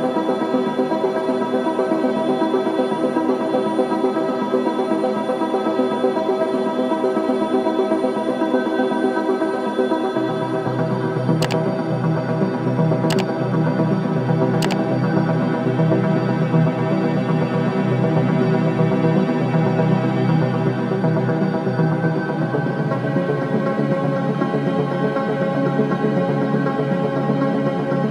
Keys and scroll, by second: 1.4 ctrl+t, 19.0 ctrl+j, 26.6 ctrl+shift+i.